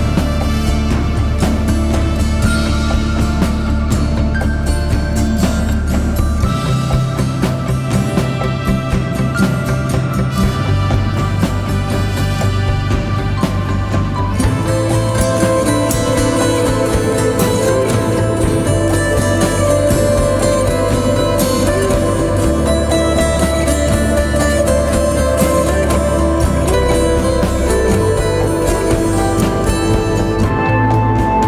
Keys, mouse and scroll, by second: 20.2 alt+click, 24.7 double click, 27.9 double click.